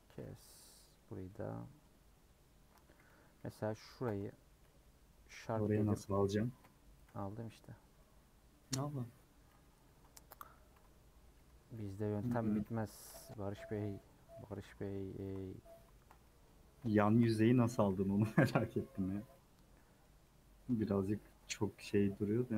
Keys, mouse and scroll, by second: 0.1 scroll down 2, 0.2 middle click, 1.1 scroll up 1, 1.2 middle click, 1.9-2.4 scroll up 2, 4.0 l, 5.2-6.6 drag, 6.6 ;, 8.0-9.1 middle drag, 9.1 scroll up 1, 9.6 scroll down 2, 9.8-12.6 typing, 13.2 middle click, 13.7 scroll up 2, 14.6 click, 15.5-16.5 middle drag, 16.5-17.1 scroll up 2, 17.1 shift+click, 17.7 a, 18.6 u, 18.9-20.2 scroll down 5, 19.3 middle click, 19.8 middle click, 20.2-22.5 middle drag.